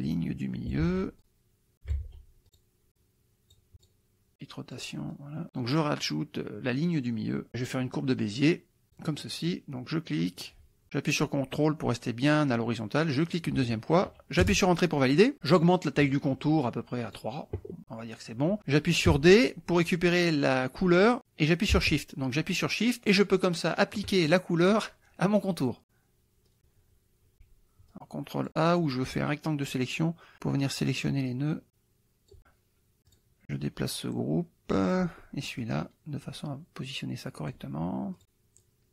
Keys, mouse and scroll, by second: 0.8 ctrl+z, 1.2 ctrl+click, 2.0 ctrl+z, 2.6 ctrl+click, 2.9 click, 3.8 click, 4.3 click, 5.2 click, 8.8 click, 9.2 middle click, 10.4 click, 13.3 ctrl+click, 14.4 Return, 16.1 right click, 17.2 click, 19.1 d, 23.0 shift+click, 25.4 click, 26.5 ctrl+click, 27.3 ctrl+a, 27.9 click, 29.3 click, 30.3-32.4 drag, 33.1-35.1 drag, 35.6-37.7 drag, 38.3 click, 38.6-38.9 drag.